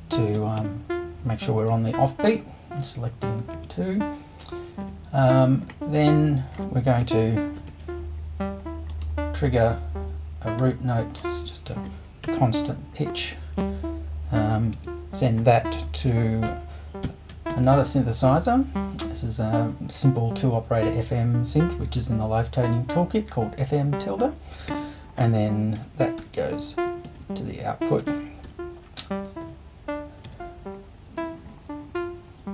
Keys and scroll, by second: 0.0-1.1 typing, 3.5 super+i, 4.8 BackSpace, 7.0 BackSpace, 7.7 super+2, 12.2 3, 12.6 6, 14.7 super+1, 16.4 f, 17.0 m, 17.5 shift+`, 24.7 super+1, 25.8-30.2 typing.